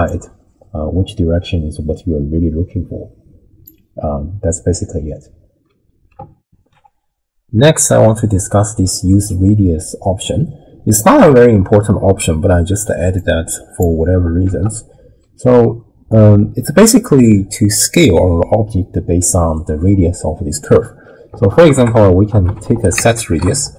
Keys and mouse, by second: 0.1-3.7 drag, 6.4 ctrl+alt+shift+w, 6.7 ctrl+alt+shift+q, 13.2 click, 14.5 ctrl+a.